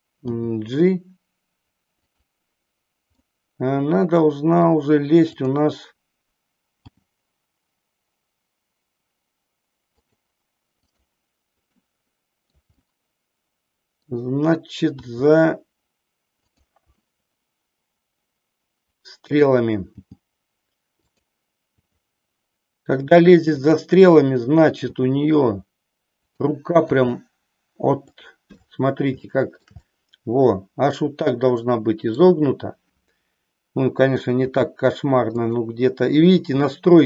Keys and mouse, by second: 0.4 g, 2.2 click, 3.1-4.7 middle drag, 5.4-6.4 drag, 6.8 g, 10.1 click, 10.8-12.2 drag, 12.4 middle click, 12.8-14.1 middle drag, 15.0 r, 17.1-19.5 middle drag, 19.8 g, 21.2 click, 21.7 r, 23.7 click, 24.8 g, 26.8 r, 28.2 click, 29.2-32.2 middle drag, 34.5 r, 35.5 click.